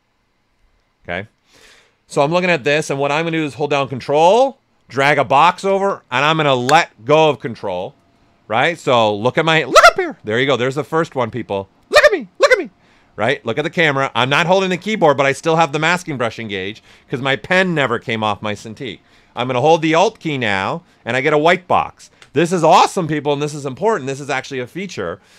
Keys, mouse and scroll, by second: 3.1 space, 3.8-13.8 ctrl+drag.